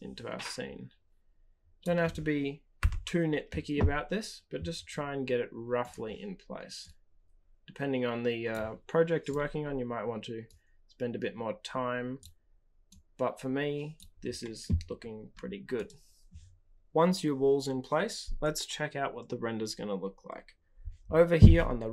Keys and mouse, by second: 2.7 KP_0, 6.7-8.5 drag, 10.4-12.2 drag, 12.9-13.9 drag, 15.7 click.